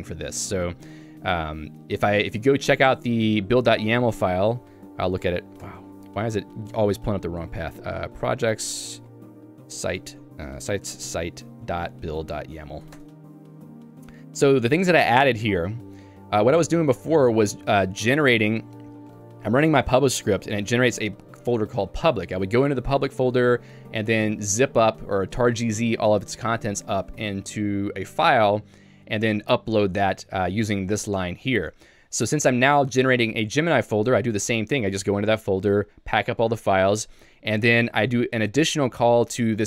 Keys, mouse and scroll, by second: 0.4 j, 13.3 Return, 14.0 j, 15.9-17.1 typing, 17.9 Escape, 18.2 k, 19.2 shift+v, 20.6 Escape, 20.9 j, 22.2-23.2 typing, 30.2 Escape, 30.4 j, 31.5-33.7 typing, 32.3 Escape, 36.8 Escape, 37.0 j, 37.9 shift+v.